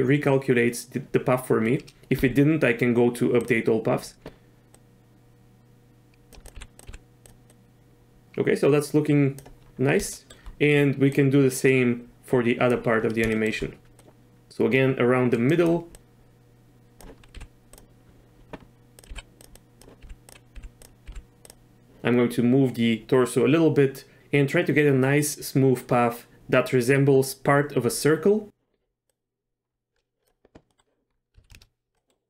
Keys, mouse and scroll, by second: 2.2 q, 4.7-6.3 drag, 6.5 g, 6.8 click, 6.9 g, 7.5-9.4 drag, 10.2 shift+middle click, 11.1-12.7 drag, 13.3 shift+middle click, 14.0-15.5 drag, 15.9-17.0 drag, 17.3 g, 18.9 click, 19.1 g, 19.5 click, 20.0 g, 20.5 g, 21.0 g, 29.1-30.3 drag, 30.7 middle click, 31.3 z, 31.5 shift+space, 31.9 middle click.